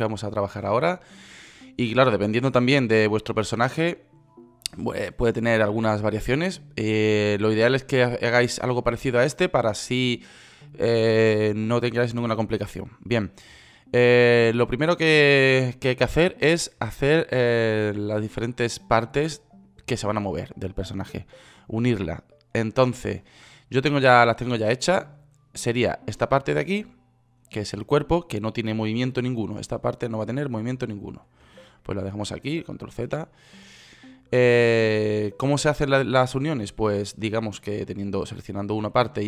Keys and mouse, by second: 9.3-15.5 middle drag, 22.4 middle click, 22.9 right click, 29.2 middle click, 33.1 ctrl+z.